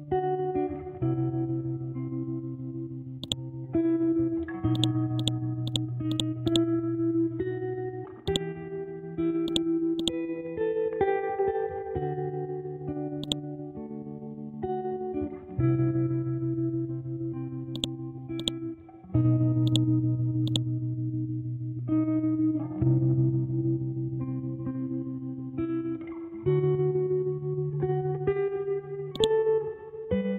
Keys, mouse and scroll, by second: 3.2 click, 4.7 right click, 5.2 click, 6.4 right click, 8.2 click, 10.2-10.8 scroll down 1, 10.8 scroll up 1, 12.1-12.8 scroll down 1, 12.8-13.2 scroll up 1, 13.2 click, 17.7 click, 20.8 scroll down 1, 22.2 scroll up 1, 26.1 scroll down 1, 28.6-29.2 scroll up 1, 29.2 click, 30.2 scroll up 1.